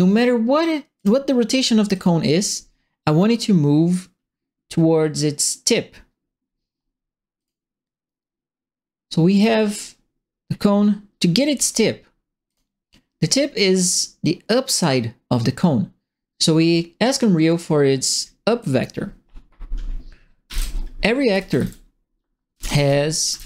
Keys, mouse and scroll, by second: 0.9 click, 1.9 click, 7.3 click, 9.3 click, 10.4 middle click, 12.4 click, 17.4 click, 18.6 click, 20.4-23.4 typing.